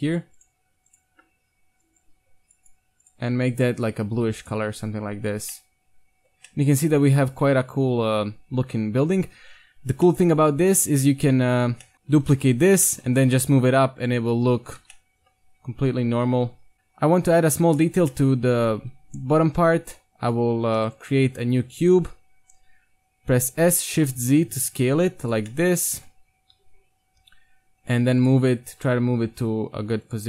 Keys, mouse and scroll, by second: 0.5 click, 0.5 right click, 0.8-1.3 right drag, 4.7 Tab, 5.5 middle click, 6.3-6.7 middle drag, 6.4 a, 6.7 middle click, 6.9-7.2 middle drag, 9.2 KP_1, 10.0-10.4 middle drag, 10.4 right click, 11.9 Tab, 12.2 shift+d, 13.1 g, 14.3 z, 14.6 z, 14.8 Tab, 15.4 Tab, 16.1 g, 16.7 a, 17.7-18.1 right drag, 18.7 KP_1, 19.6 Tab, 20.5 a, 23.5 s, 25.5 middle click, 26.6 KP_1, 27.1 g, 28.3 z, 28.6 g.